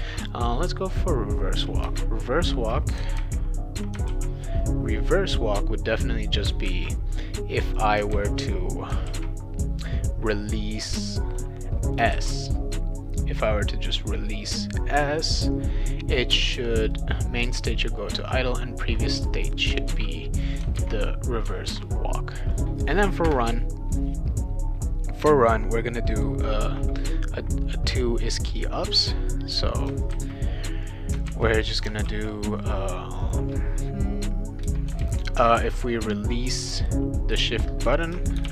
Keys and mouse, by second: 0.2 click, 1.8 Return, 3.2 ctrl+v, 4.1 ctrl+z, 5.3-6.4 drag, 6.6 ctrl+c, 7.7 click, 8.1 ctrl+v, 9.1 ctrl+z, 11.4 click, 12.1 shift+s, 16.8 click, 16.9 click, 19.3 click, 19.5 click, 19.8 ctrl+c, 20.3 click, 20.5 click, 20.8 ctrl+v, 21.7 ctrl+s, 22.5 click, 23.2 Return, 28.6-29.8 drag, 30.1 ctrl+c, 30.8 click, 31.3 ctrl+v, 32.1 ctrl+z, 33.2 click, 34.6 Return, 35.0 ctrl+v, 35.6 ctrl+z, 37.3 click, 38.1-38.5 typing.